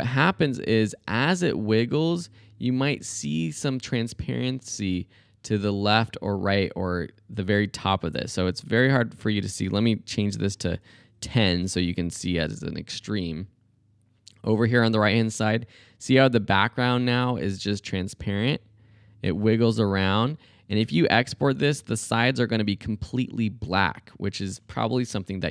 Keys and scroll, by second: 0.9 space, 11.1 Left, 11.4 Right, 11.5-12.4 typing.